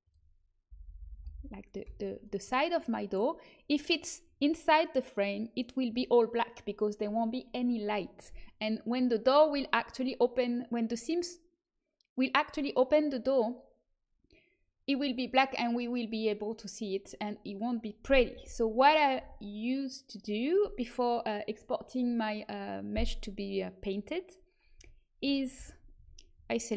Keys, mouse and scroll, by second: 1.8 h, 24.7 a, 25.5 alt+h, 25.9 a.